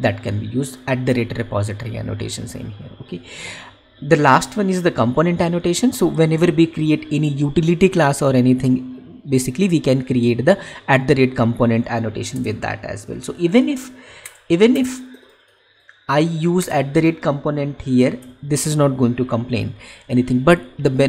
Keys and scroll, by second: 18.1 ctrl+y.